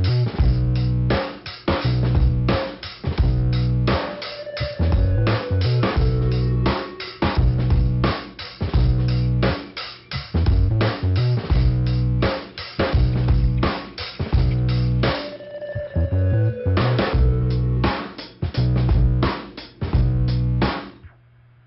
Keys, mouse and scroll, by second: 0.8 click, 2.2 click, 3.5 click, 4.0 click, 4.6 click, 5.8 click, 7.0 scroll down 2, 8.1 scroll up 2, 8.9 click, 10.1 click, 10.6 middle click, 12.8 click, 13.8 scroll down 1, 14.5 middle click, 19.8 right click, 20.8 click, 20.8 ,.